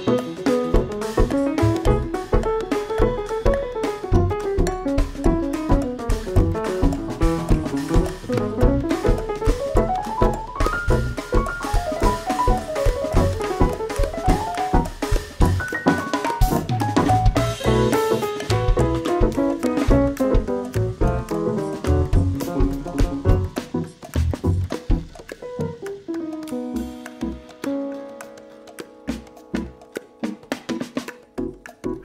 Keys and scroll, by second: 0.3 ctrl+v, 1.6 alt+Tab, 2.4 Right, 4.7 Delete, 8.1 ctrl+v, 8.5 ctrl+l, 8.9 ctrl+c, 9.7 ctrl+v, 10.5 ctrl+v, 11.0 x, 11.7 ctrl+c, 12.2 ctrl+v, 13.5 ctrl+z, 13.8 ctrl+z, 14.9 ctrl+v, 16.7 ctrl+v, 19.4 ctrl+v, 20.4 shift+Left, 23.5 ctrl+v, 24.9 Delete, 28.6 x, 31.2 shift+v, 31.3 p, 31.4 Return.